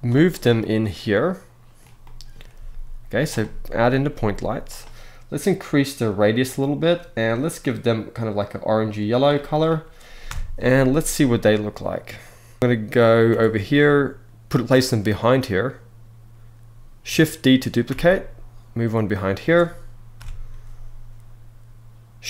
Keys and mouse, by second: 0.3-1.5 middle drag, 1.7-2.0 middle drag, 2.2 g, 3.1-3.5 middle drag, 3.8 g, 5.7 click, 7.0 click, 10.0 KP_0, 10.4 z, 12.6 KP_7, 12.9 g, 14.7 click, 17.5 shift+d, 19.8 KP_0.